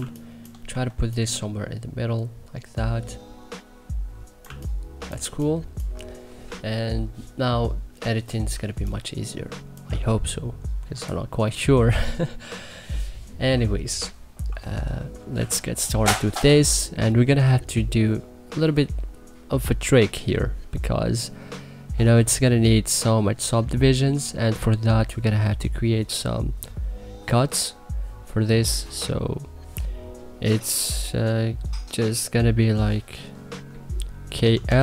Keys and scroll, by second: 0.4 e, 4.2 2, 4.9 1, 8.2 2, 15.1 1, 34.1 k, 34.4 l.